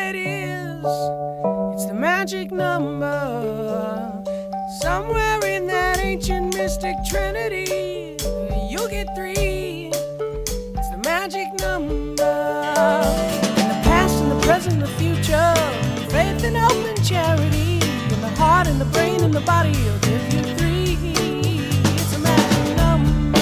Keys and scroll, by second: 4.6 shift+super+a, 5.0 shift+super+c, 5.3 shift+super+w, 7.8 shift+super+v, 8.4 shift+super+t, 8.9 shift+super+-, 14.1 shift+super+=, 15.2 shift+super+-, 16.8 shift+super+i.